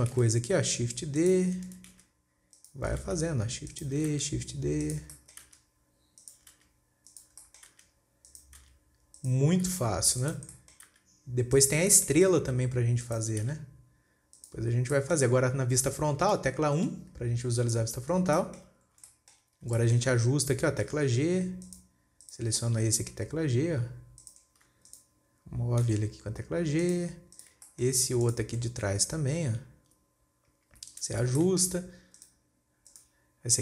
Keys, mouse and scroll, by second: 0.6 shift+d, 2.3 shift+d, 4.6 shift+d, 5.6-5.9 shift+middle drag, 5.9 shift+d, 7.0 shift+d, 7.8-8.2 shift+middle drag, 8.2 shift+d, 9.1 shift+d, 11.0 shift+middle click, 11.3 shift+d, 12.3 shift+middle click, 12.8 shift+d, 13.9 shift+d, 15.1 scroll down 3, 15.3-17.2 middle drag, 17.2 KP_1, 17.7-18.5 scroll up 3, 18.5-18.8 scroll down 4, 18.8-19.3 shift+middle drag, 19.3-20.2 scroll up 6, 19.6 shift+middle click, 20.2-21.2 shift+middle drag, 21.2 g, 22.7 click, 23.2 g, 25.3 click, 26.4 g, 27.8 click, 28.1-28.7 shift+middle drag, 28.7 click, 29.0 scroll up 2, 29.9 g, 31.7 scroll down 1, 31.9 shift+middle click, 32.6 click, 33.4 click.